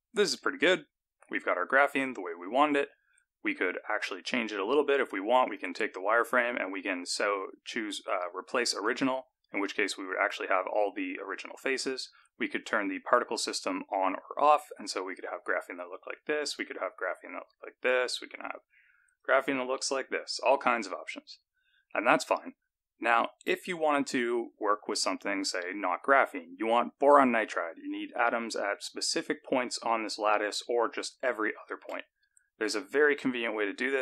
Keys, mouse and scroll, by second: 4.2 click, 5.6 click, 9.3 click, 13.4 click, 17.0 click, 19.7 click, 21.4-22.2 scroll down 1.